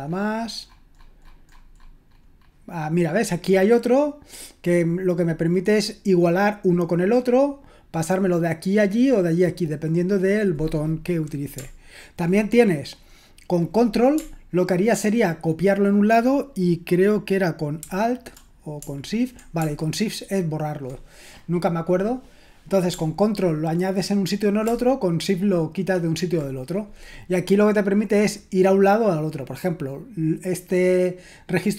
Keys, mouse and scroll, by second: 11.6-12.3 scroll down 1, 12.3-14.2 scroll down 1, 14.2-16.2 scroll down 1, 16.2-17.8 scroll down 1, 17.8-18.4 scroll down 1, 18.4-20.9 scroll down 1, 20.9-22.9 scroll down 1, 22.9-24.7 scroll down 1, 24.7-26.4 scroll down 1, 26.4-31.7 scroll down 1.